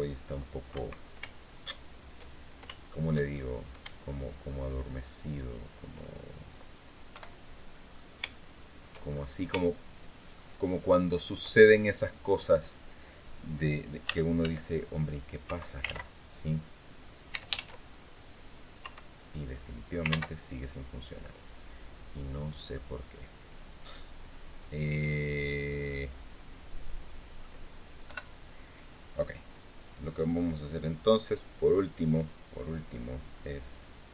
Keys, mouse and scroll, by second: 0.4 Escape, 1.1 shift+scroll down 2, 1.6-2.3 shift+scroll down 3, 2.5 shift+middle click, 3.4 scroll up 1, 4.4 shift+right click, 5.0 shift+right click, 5.8-6.2 shift+scroll down 1, 6.8 KP_7, 7.5-7.9 scroll down 3, 8.0 shift+middle click, 8.8-9.2 shift+scroll up 3, 9.4 shift+click, 13.8 e, 14.1 s, 15.2 Escape, 15.6 ctrl+z, 16.2 scroll down 2, 17.0 s, 18.5 Escape, 19.2-19.6 scroll up 2, 19.8 ctrl+z, 21.3-22.8 drag, 24.7-25.0 scroll down 2, 25.2-27.3 drag, 27.8 KP_7.